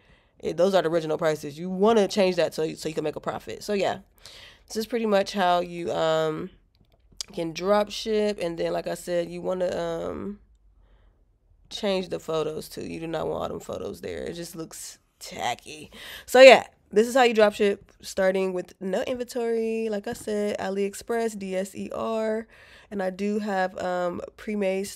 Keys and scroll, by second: 17.5 alt+q.